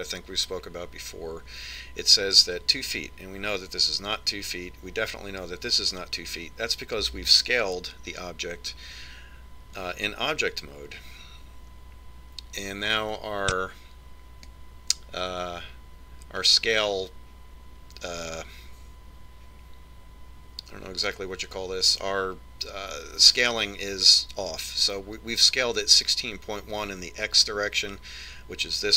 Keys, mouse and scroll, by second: 9.5 Tab, 13.4 click.